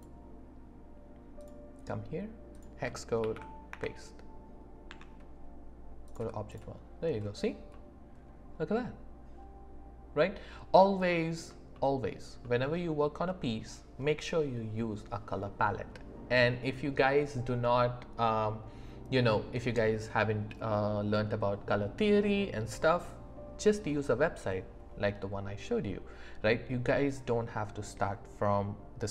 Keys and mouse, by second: 1.4 click, 4.9 Tab, 7.7 middle click, 8.6-10.1 drag, 8.6-10.1 right drag, 10.1 middle click, 11.1 middle click, 11.7 shift+middle click, 12.4 middle click, 13.3 shift+click, 13.6 shift+middle click.